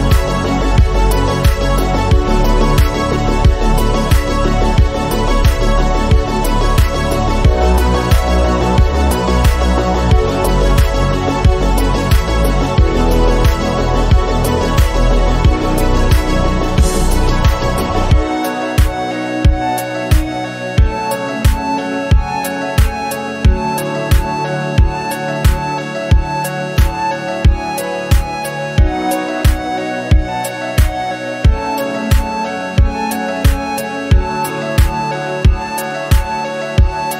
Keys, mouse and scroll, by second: 0.8 r, 2.0 g, 10.0 r, 11.7 g, 12.7 r, 13.9 g, 19.4 g, 23.1 scroll down 1, 23.4 shift+middle click, 23.9 shift+d, 25.0 r, 27.2 g, 29.2 g, 33.5 scroll down 1, 33.7 shift+middle click, 34.2 g.